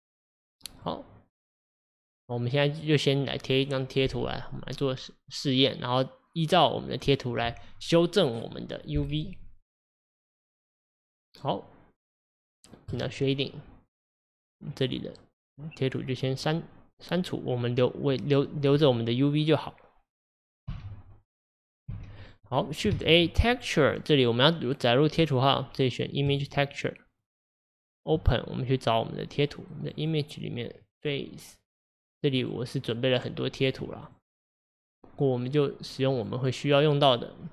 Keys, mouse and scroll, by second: 13.0 click, 20.7 x, 21.7 drag, 21.9 x, 28.4-37.5 drag.